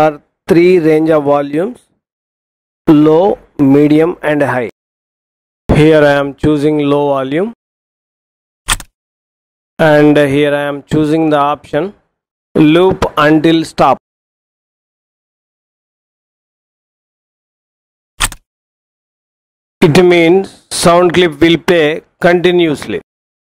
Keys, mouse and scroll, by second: 8.5 click, 18.1 click.